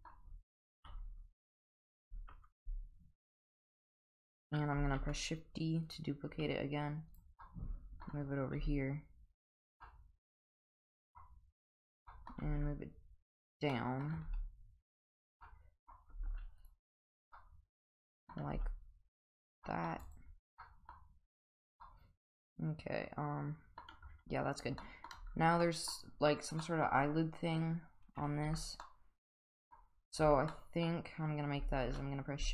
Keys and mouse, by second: 0.8 KP_1, 2.6 g, 5.0 shift+d, 6.3 s, 7.4-8.1 middle drag, 8.6 g, 9.8-11.1 middle drag, 12.1 middle click, 12.4 g, 13.7-14.0 middle drag, 14.3 g, 15.4-15.9 middle drag, 16.1 g, 17.4-18.3 middle drag, 18.5 g, 19.6 middle drag, 20.1 click, 20.6-20.9 middle drag, 21.3 click, 21.8-23.8 middle drag, 24.8 middle drag, 25.6 middle drag, 26.6 middle drag, 28.4 Tab, 28.8 middle click, 30.2 Tab, 30.5-30.9 middle drag, 31.8 shift+a.